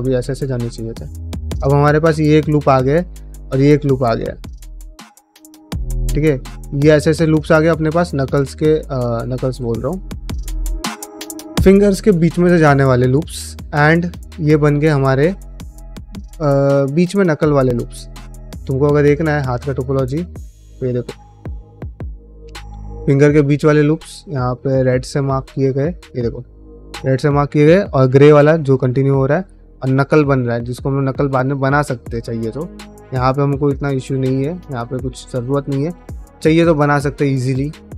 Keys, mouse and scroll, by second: 0.2 ctrl+middle click, 0.5 middle click, 1.2 shift+middle click, 1.5 middle click, 1.7 3, 2.1 alt+click, 2.7 middle click, 3.2 alt+shift+click, 3.5 middle click, 3.9 ctrl+z, 4.3 alt+shift+click, 5.5 middle click, 6.3 alt+shift+click, 6.7 middle click, 7.4 alt+shift+click, 7.9 middle click, 8.5 alt+shift+click, 8.8 middle click, 9.3 ctrl+z, 10.1 alt+shift+click, 10.5 middle click, 11.2 middle click, 12.1-13.4 middle drag, 13.7 middle click, 15.5 middle click, 16.5 shift+middle click, 16.9 ctrl+middle click, 34.5 middle click, 34.8 shift+middle click, 35.0 middle click.